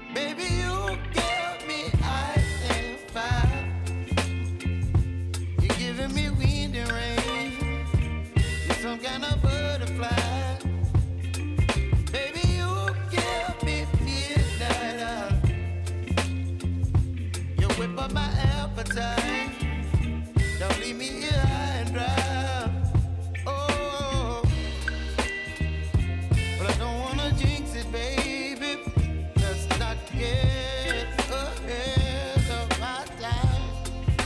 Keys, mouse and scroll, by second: 2.8 ctrl+Num_Lock, 2.8 click, 3.1 right click, 5.4 click, 7.8 Return, 8.4-9.7 typing, 10.8 click, 18.3 click, 20.0 right click, 21.2 click, 24.8 Return, 25.3-28.6 typing, 31.8 click.